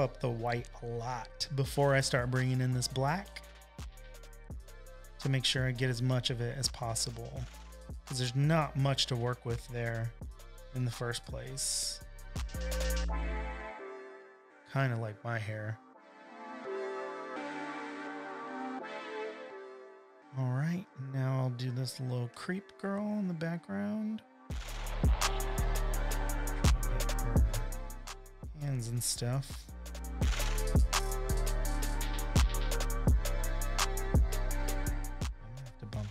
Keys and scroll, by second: 21.4 space, 21.9 space, 22.0 space, 22.6 v, 24.7 super+l.